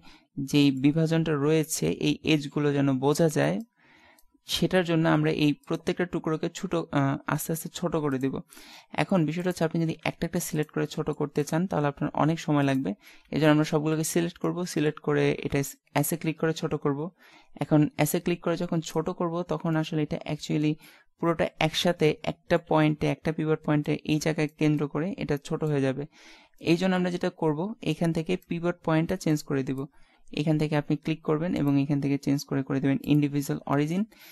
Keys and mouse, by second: 5.7-7.6 right drag, 6.5 s, 8.5 middle click, 9.9 s, 11.7 s, 13.6 a, 13.9 a, 14.6-16.5 middle drag, 15.4 s, 19.7 middle click, 33.8 middle click.